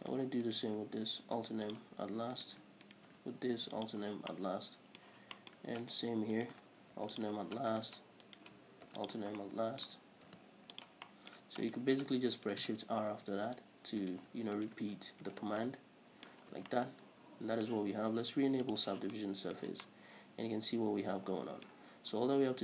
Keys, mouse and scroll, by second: 0.3 right click, 0.7 shift+right click, 1.5 alt+m, 2.6 right click, 3.1 shift+right click, 3.8 alt+m, 4.6-6.1 middle drag, 5.4 scroll up 2, 6.1 right click, 6.6 shift+right click, 7.3 alt+m, 8.0 right click, 8.5 shift+right click, 9.2 alt+m, 10.1 middle click, 10.6 alt+m, 11.4 middle click, 11.9 right click, 12.7 shift+right click, 13.4 shift+r, 14.3 right click, 14.9 shift+right click, 15.5 shift+r, 15.9-19.0 middle drag, 16.7 scroll down 2, 16.8 Tab, 19.0 click, 19.4-22.6 middle drag, 19.9 Tab.